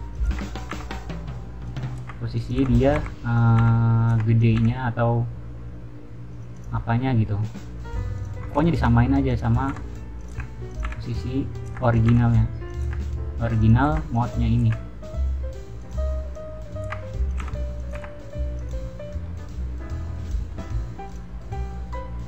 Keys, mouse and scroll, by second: 0.0-4.5 typing, 0.1 click, 0.5 click, 1.6 click, 2.3 click, 2.7 click, 3.3 click, 3.9 click, 4.3 click, 6.2 click, 6.5 click, 6.7-7.2 middle drag, 8.1 click, 9.2 click, 9.6 g, 10.1 click, 10.6 click, 11.5 click, 11.6 r, 11.9 click, 12.1 g, 12.6 click, 13.5 click, 13.8 r, 14.1 click, 14.5 r, 15.7 click, 16.7 r, 17.2 click, 17.3 g, 17.7 click, 17.9 r, 18.5 click, 19.1-19.7 middle drag, 20.0-20.5 middle drag, 21.0 click.